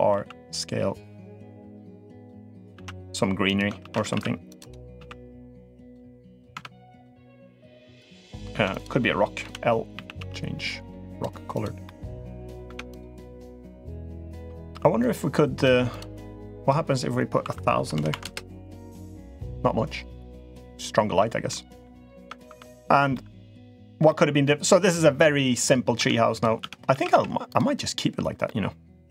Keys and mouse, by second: 2.5 ctrl+r, 3.6 ctrl+z, 3.9 ctrl+r, 4.7 s, 5.8 g, 6.3 Tab, 8.3 Tab, 8.5 click, 9.2 l, 9.7 a, 9.9 g, 11.3 click, 11.6-12.1 middle drag, 12.4 Tab, 12.8 click, 13.6-14.1 middle drag, 15.4 g, 16.4-19.0 drag, 17.7 0, 17.8 0, 20.5 middle click, 21.3-21.6 middle drag, 22.1 Tab, 22.3 Tab, 22.6 drag, 22.9-23.6 middle drag, 23.8-24.2 middle drag, 25.7 Tab, 26.1 click, 26.4 Tab, 26.8 a, 27.0 a, 27.4 click, 28.2-28.9 middle drag.